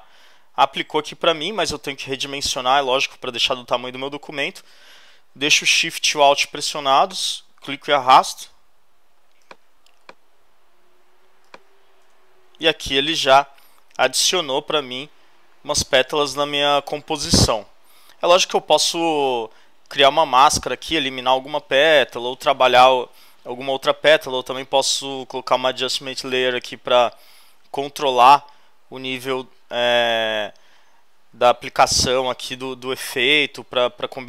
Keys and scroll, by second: 12.0 shift+Return, 12.7 Return.